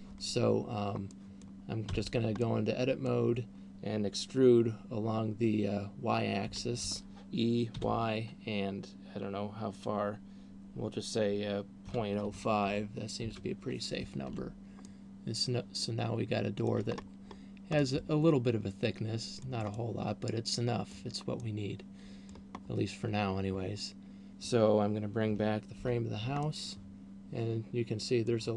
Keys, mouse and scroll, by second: 1.6 middle click, 2.1 Tab, 2.9 middle click, 6.9 e, 14.9 Tab, 14.9 middle click, 17.4-18.1 scroll up 2, 17.9 middle click, 19.9 middle click, 21.9 middle click, 23.1 scroll down 2, 26.1 alt+h, 26.9 middle click.